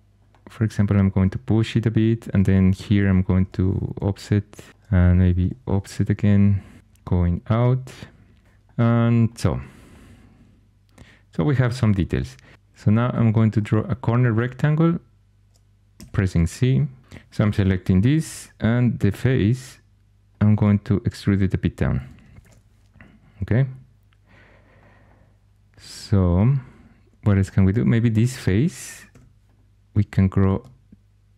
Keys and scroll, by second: 3.3 o, 5.3 o, 15.9 c, 17.0 2, 18.1 shift+h, 18.9 3, 22.3 alt+h, 29.0 3.